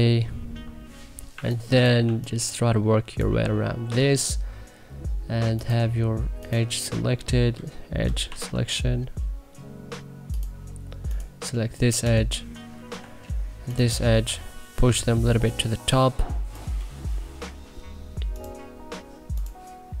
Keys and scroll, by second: 1.2 1, 1.9 2, 3.8 w, 8.2 e, 12.8 e, 14.1 e.